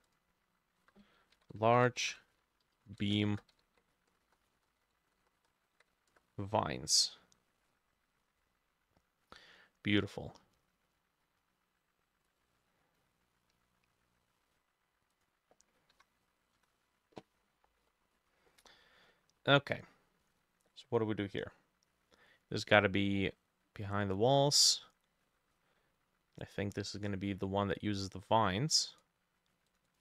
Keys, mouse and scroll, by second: 0.8 F2, 1.4-6.7 typing, 3.3-5.9 drag, 3.3 middle click, 16.0 Delete, 16.6 Return, 17.8-18.8 scroll down 11, 18.8 middle click, 19.4-19.8 scroll up 1, 21.4-24.7 scroll up 5, 29.9 double click.